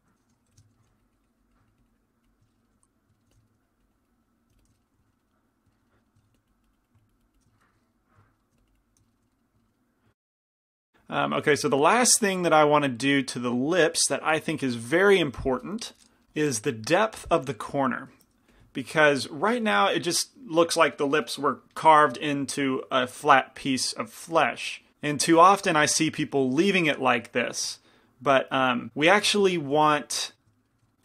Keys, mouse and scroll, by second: 0.0 click, 0.5 f, 0.5 i, 0.7 middle click, 0.9 f, 1.1-3.1 drag, 3.1 middle click, 3.3 f, 3.7-5.5 drag, 6.4 f, 6.6-8.1 drag, 7.8 middle click, 8.3 middle click, 8.7 click, 8.7-10.0 middle drag, 18.3 shift+c, 18.3 shift+f, 18.9-20.5 drag, 19.0-20.6 middle drag, 19.0-20.5 right drag, 25.7-31.0 middle drag.